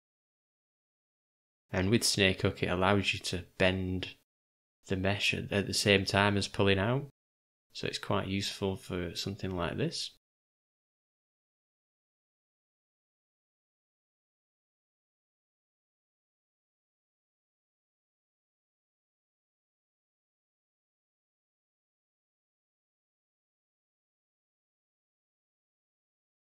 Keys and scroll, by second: 0.1 v, 5.5-7.3 typing, 12.3 o, 13.3 g, 21.0 d, 22.6 u, 24.2 shift+f, 25.4-26.3 typing.